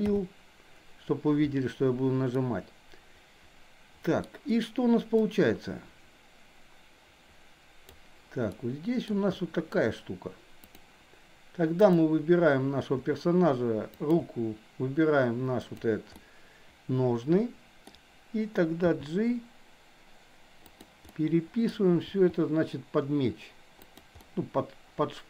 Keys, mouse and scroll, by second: 0.0 n, 2.4-4.3 middle drag, 5.3-8.0 drag, 8.5-9.0 shift+middle drag, 10.6 drag, 14.1 shift+click, 15.6 click, 16.3-17.9 middle drag, 18.9 g, 21.1 scroll up 1, 21.3 middle click, 22.0 g, 24.1 scroll up 1, 24.3-25.2 middle drag.